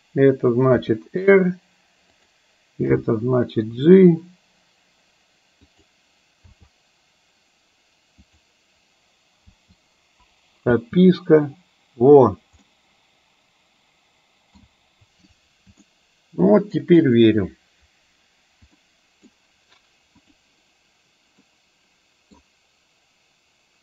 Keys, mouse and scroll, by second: 0.9 r, 2.9 g, 6.6 r, 9.6 i, 10.8 space, 12.8-14.7 middle drag, 15.9-16.9 shift+middle drag, 18.9-19.3 middle drag, 21.4-22.4 middle drag.